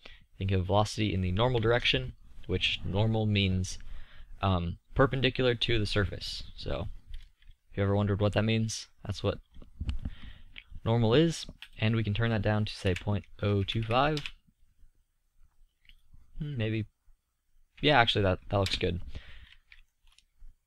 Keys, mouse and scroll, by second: 3.4-7.8 middle drag, 13.4-15.7 middle drag, 19.0-20.1 middle drag.